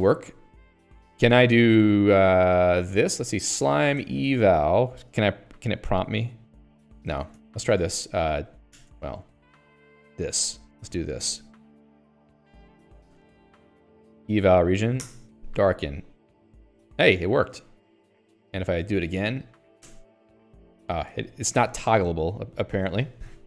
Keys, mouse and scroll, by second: 0.4 click, 1.6 click, 2.3 Escape, 2.5 Escape, 2.7-5.4 typing, 7.4 ctrl+g, 7.7 Escape, 7.8-14.5 typing, 9.4 Escape, 15.4 Return, 17.8 Return, 19.3 alt+x, 20.2 Return, 21.4 Return, 23.1 Return.